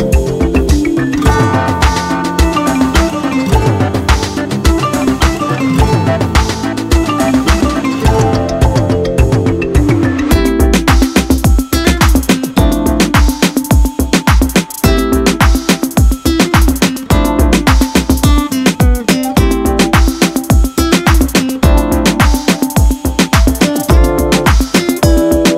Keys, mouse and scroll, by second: 5.2 click, 5.2 space, 5.9-7.2 ctrl+drag, 7.9 space, 8.3 click, 8.5-9.3 space, 10.3 click, 15.4 space, 15.7 ctrl+click, 15.9-17.6 ctrl+space, 16.6 ctrl+space, 18.3 click, 20.0 space, 20.5 space, 21.2 click, 25.5 click.